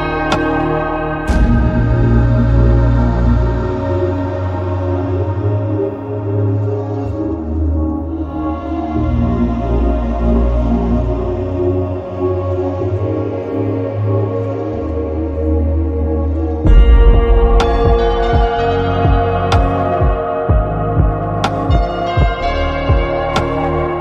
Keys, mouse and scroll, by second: 3.7-4.3 right drag, 5.0-5.9 right drag, 7.1-7.7 right drag, 7.7-9.7 drag, 12.6 click, 14.5 click, 15.4 click, 19.1-19.6 middle drag, 20.8 middle click, 23.6-24.0 middle drag.